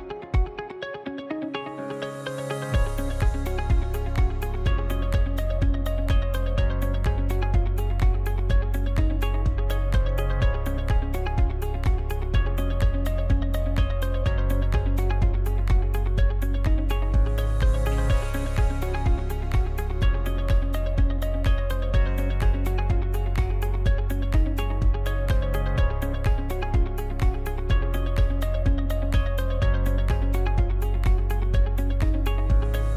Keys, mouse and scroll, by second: 8.2 Tab, 9.4-23.5 drag, 23.5-27.7 middle drag, 29.3-32.9 drag.